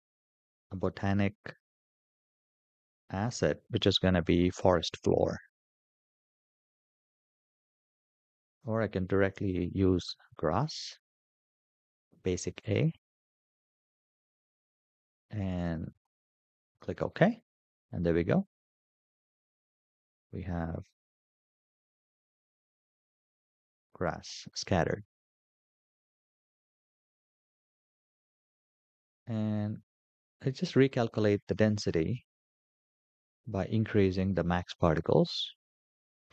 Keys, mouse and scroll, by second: 21.3 click, 22.3-22.7 scroll up 4, 23.8 scroll down 2, 24.6-25.0 shift+middle drag, 26.6-28.3 scroll down 10, 30.9 click, 33.9-36.3 drag.